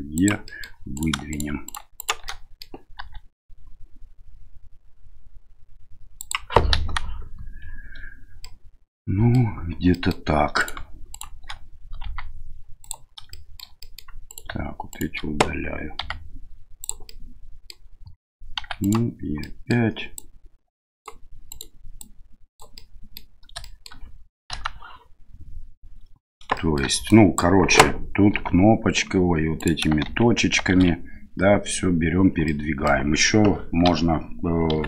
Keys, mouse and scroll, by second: 0.5 middle click, 0.9 right click, 1.3 shift+right click, 1.6 right click, 2.0 shift+right click, 2.2 middle click, 3.0 e, 6.7 KP_1, 8.4 middle click, 9.9 middle click, 10.6 right click, 11.1 shift+right click, 12.0 x, 13.3 middle click, 13.8 middle click, 14.3 right click, 14.9 right click, 16.0 x, 17.1 middle click, 18.6 1, 18.8 right click, 19.4 middle click, 20.1 click, 21.5 right click, 22.0 click, 22.8 middle click, 23.6 shift+middle click, 24.5 KP_1, 26.6 shift+middle click, 27.1 click, 28.3 g, 30.0 shift+z, 30.8 shift+z, 32.4 middle click, 33.8 KP_Divide, 34.7 KP_7.